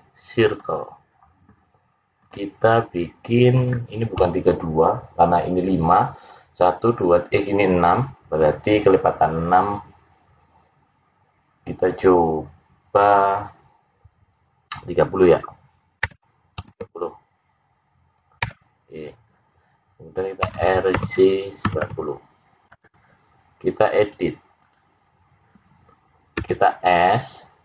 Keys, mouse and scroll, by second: 2.2 click, 3.7 click, 20.4 r, 23.9 click, 26.3 s.